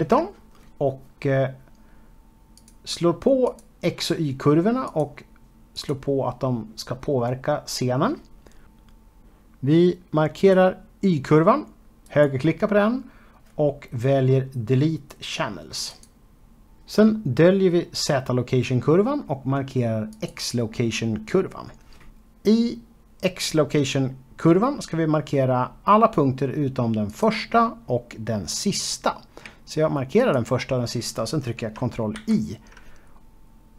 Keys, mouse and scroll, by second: 0.5 click, 1.4 click, 8.2 click, 10.7 click, 12.3 right click, 16.2 click, 17.5 click, 19.6 click, 27.0 click, 30.1 shift+click.